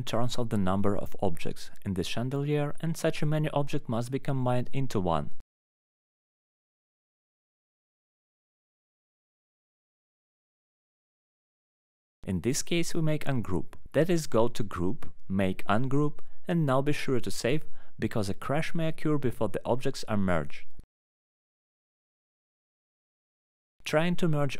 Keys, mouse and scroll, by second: 0.5 click, 1.0 Delete, 1.7 ctrl+z, 2.1-2.9 scroll, 2.9 click, 4.2 click, 4.7 click, 5.8 Delete, 6.4 click, 6.5 Delete, 7.4 alt+middle click, 7.8 click, 9.5 click, 10.2 click, 10.9 alt+middle click, 11.0 alt+q, 12.2 alt+middle click, 12.3 middle click, 12.6 middle click, 14.1 click, 17.2 scroll down 1, 17.9 click, 20.0 click, 20.9 click, 21.7 ctrl+v, 21.7 Return, 21.7 ctrl+click, 21.7 click, 22.1 click, 23.1 click, 23.3 alt+middle click, 23.3 click, 23.5-24.5 typing.